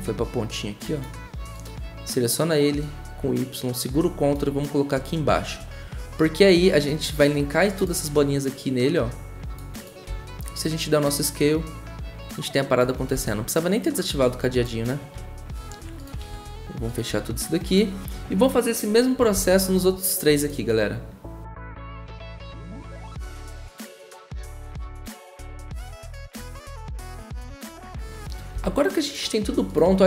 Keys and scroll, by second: 10.1 s, 13.1 ctrl+z, 16.2 ctrl+a, 19.3 v, 21.6 ctrl+z, 24.2 y, 24.7 v, 25.2 y, 27.0 v, 28.5 v.